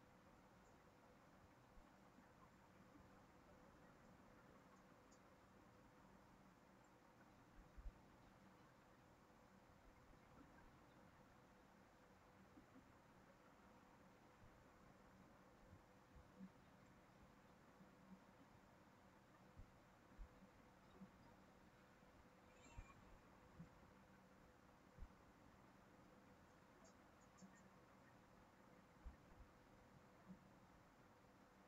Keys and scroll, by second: 8.9 ctrl+c, 9.1 ctrl+v.